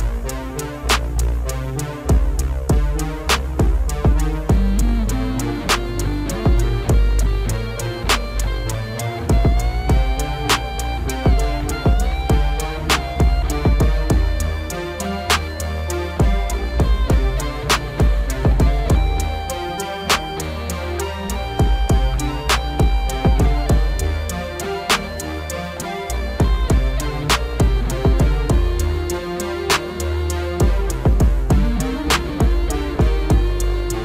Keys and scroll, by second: 7.2 ctrl+s, 19.3 F4, 27.4 F4.